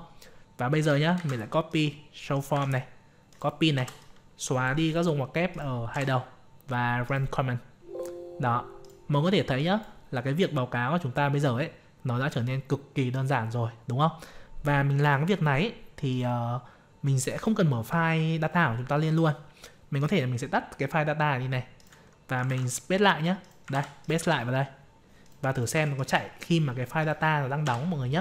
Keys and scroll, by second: 1.1 ctrl+c, 2.5 ctrl+v, 22.4 ctrl+v, 23.7 ctrl+c, 24.3 ctrl+v.